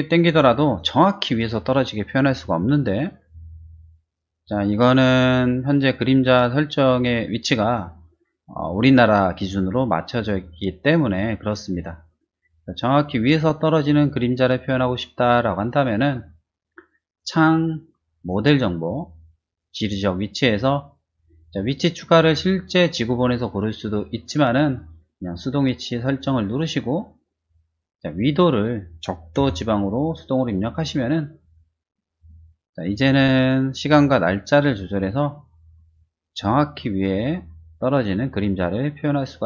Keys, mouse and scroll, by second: 3.3 click, 5.1-7.0 drag, 7.6 click, 15.9 click, 17.0 click, 18.2 click, 19.6 click, 26.5 click, 28.1 click, 29.3 o, 30.7 click, 32.1 click, 34.1-35.9 drag, 36.7-39.4 drag.